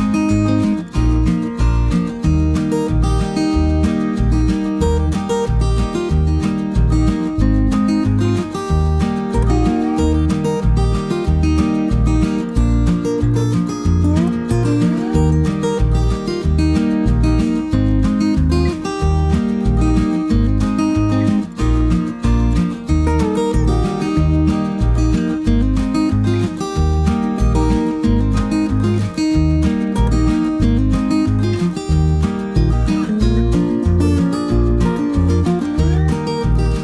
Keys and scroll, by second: 5.9 typing, 7.2-8.0 typing, 15.4 ctrl+z, 21.8 typing, 25.0 b, 29.8 Delete, 30.2-32.2 typing, 35.2 b, 36.2 Page_Down.